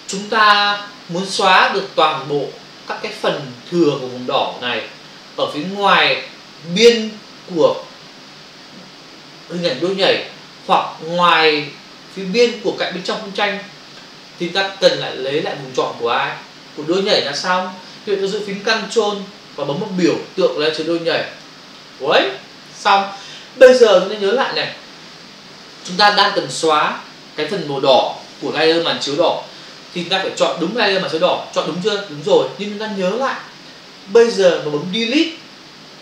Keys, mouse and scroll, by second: 21.4 ctrl+click.